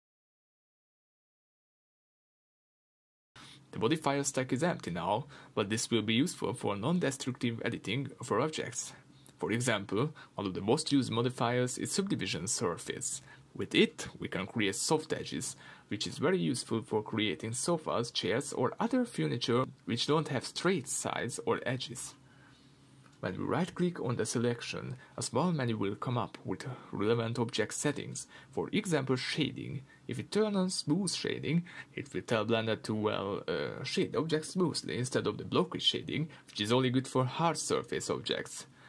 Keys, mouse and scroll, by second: 0.8 scroll down 1, 1.2-14.2 shift+middle drag, 1.4-6.5 scroll up 2, 6.5-14.2 scroll up 1, 14.2-19.8 drag, 16.9 scroll down 1, 21.6 click, 22.1-30.9 shift+middle drag, 22.4-30.9 scroll up 2, 30.9-32.9 right drag, 32.9-38.8 shift+middle drag, 33.3-33.7 scroll up 2, 35.4 scroll down 2.